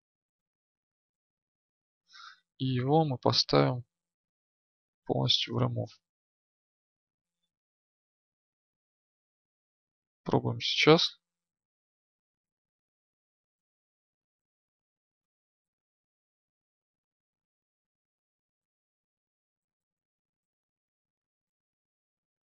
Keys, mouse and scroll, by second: 8.0 Tab, 11.4-13.0 drag, 13.0 right click, 13.9-22.1 drag.